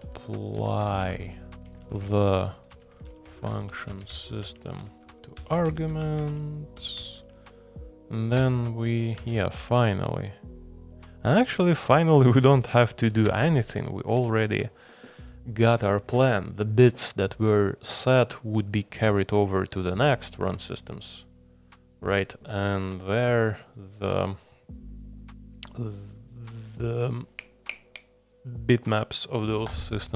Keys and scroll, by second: 0.0-7.7 typing, 8.3 Return, 8.9-10.3 typing, 11.6-13.7 typing.